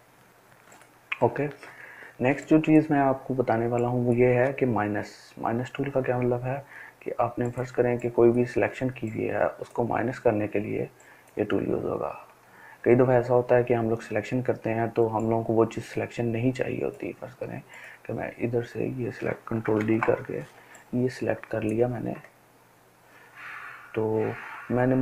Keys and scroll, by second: 19.8 ctrl+d.